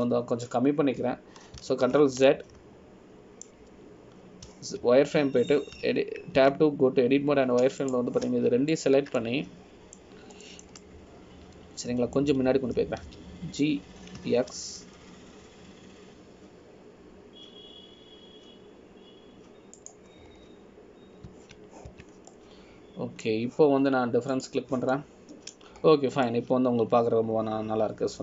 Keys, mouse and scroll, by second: 0.8 scroll up 1, 3.7 ctrl+z, 4.4 middle click, 6.6 z, 7.9 1, 8.5 Tab, 10.0 click, 10.9 shift+click, 11.3 middle click, 12.6 middle click, 15.2 g, 22.4 scroll down 2, 23.4 z, 24.1 Tab, 24.5 middle click, 26.5 click, 27.1 middle click, 28.0 scroll up 1.